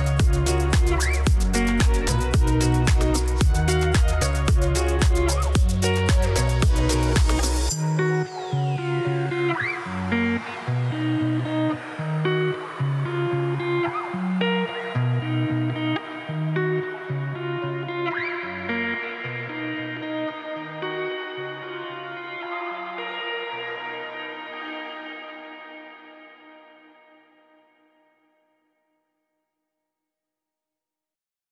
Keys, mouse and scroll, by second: 0.2 click, 0.9 Tab, 1.1 click, 2.1 click, 2.8 click, 4.0-4.4 drag, 5.2-5.6 drag, 6.7-7.3 drag, 8.0-8.4 drag, 9.2-9.7 drag, 10.8-11.3 drag, 13.1-13.7 drag, 14.4 Tab, 14.7 Tab, 14.8 click, 15.8 click, 16.2 click, 17.1 click, 17.8-19.1 drag, 20.0-21.3 drag, 21.9-23.5 drag, 24.1-25.5 drag, 26.2-27.4 drag, 28.0-29.8 drag, 30.5-31.5 drag.